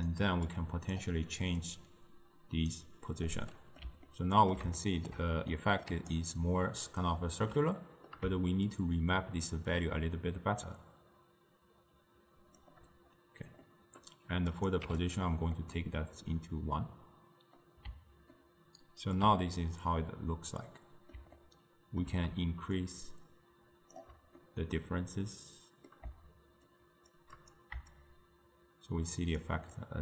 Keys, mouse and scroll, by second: 0.6 click, 1.7 click, 3.4-5.9 middle drag, 5.9 d, 6.2-7.5 right drag, 7.5 d, 7.8-8.8 middle drag, 8.8-11.8 shift+drag, 13.7 middle click, 14.6 click, 15.6-22.9 middle drag, 22.9-24.4 shift+drag, 24.4-26.7 middle drag, 26.7 shift+click, 28.0-30.0 shift+drag.